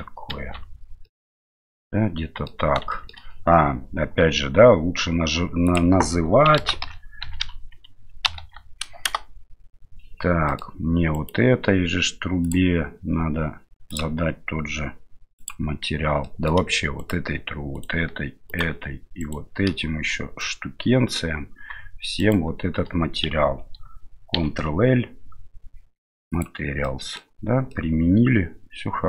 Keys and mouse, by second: 0.5 Tab, 1.0-2.5 middle drag, 2.9 shift+middle drag, 5.6-9.9 drag, 10.5 middle click, 11.1-12.5 right drag, 12.5 click, 13.9 click, 16.2 middle click, 17.0 shift+right click, 17.7 shift+right click, 18.5 shift+right click, 19.2 shift+right click, 20.4-21.2 middle drag, 22.2 shift+right click, 24.3 ctrl+l, 26.8-27.2 middle drag, 27.7-29.0 middle drag.